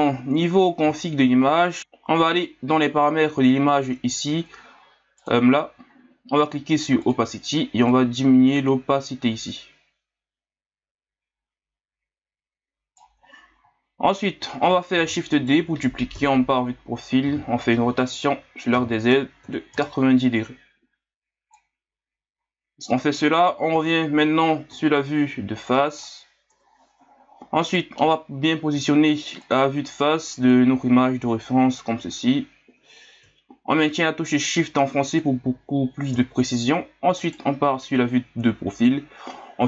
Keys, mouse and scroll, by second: 0.0 scroll up 1, 0.0 scroll down 2, 0.5 middle click, 0.5-1.0 scroll up 7, 0.7 middle click, 1.0-1.3 scroll down 2, 1.3 scroll up 1, 2.5-2.9 scroll down 1, 2.9-3.7 ctrl+scroll up 1, 3.7 click, 5.2 click, 7.0 click, 7.9-10.9 drag, 14.9 shift+d, 16.1 KP_3, 17.2 r, 25.8 middle click, 26.5 KP_1, 27.7 right click, 29.4-33.5 drag, 36.1 KP_3, 37.2 right click.